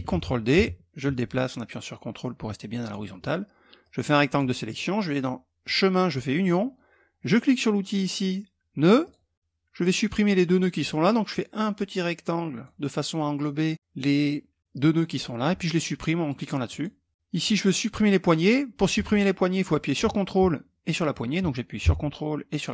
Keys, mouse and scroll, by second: 0.0-2.6 ctrl+drag, 3.4 click, 5.2 click, 6.0 click, 8.6 click, 10.9-12.7 drag, 16.2 click, 17.1-18.3 drag, 18.7 ctrl+click, 22.6 ctrl+click.